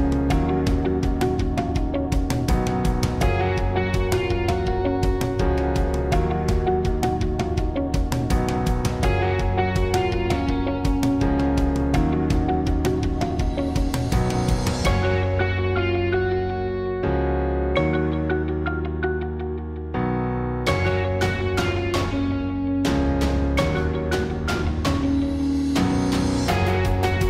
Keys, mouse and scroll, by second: 0.6 s, 5.8 ctrl+r, 8.3-9.3 drag, 9.2 ctrl+r, 9.3 middle click, 10.4-12.3 drag, 11.1 ctrl+r, 12.8-14.1 drag, 14.2-16.0 drag, 14.4 ctrl+r, 16.4 ctrl+r, 16.8 ctrl+r, 18.1 ctrl+r, 19.2 click, 22.0-23.4 middle drag, 23.4 KP_7, 23.6 click, 24.1 click, 24.8 KP_7, 24.8 b, 25.0 click, 25.8 click, 26.4 click, 26.8 b.